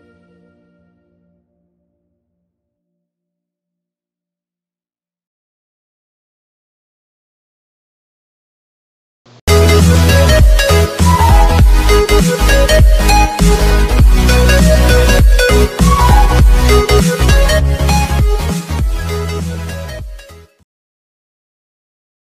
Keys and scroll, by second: 9.0 ctrl+z.